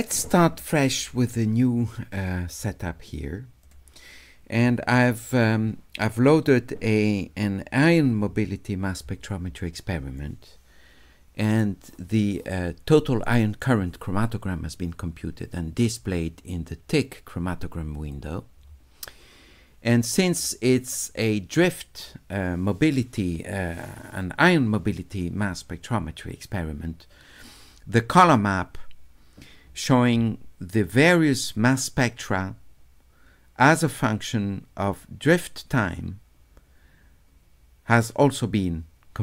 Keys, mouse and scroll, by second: 3.6 click, 17.9 click, 20.3 click.